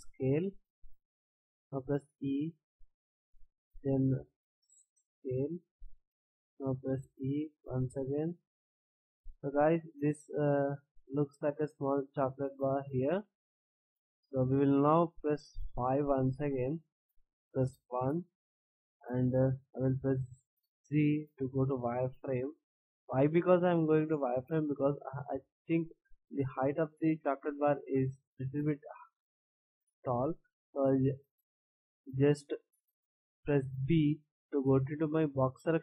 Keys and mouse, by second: 2.0 e, 4.2 s, 7.0 e, 8.8 a, 9.2 middle click, 10.1 middle click, 20.1 z, 24.0-25.7 middle drag, 33.8 b.